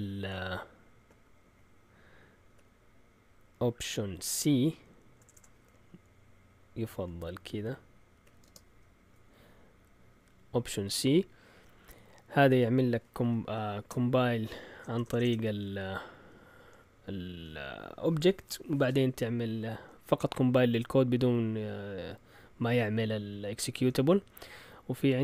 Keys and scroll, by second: 2.5 typing, 4.2-6.8 typing, 7.9-8.8 typing, 13.2 End, 13.9-14.7 typing, 23.9 Left, 24.5 typing, 24.6 Left.